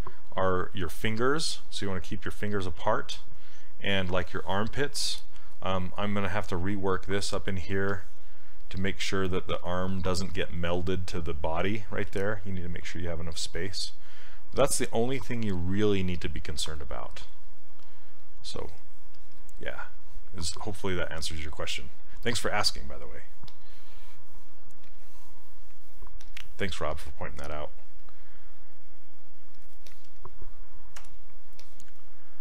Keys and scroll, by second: 31.0 w.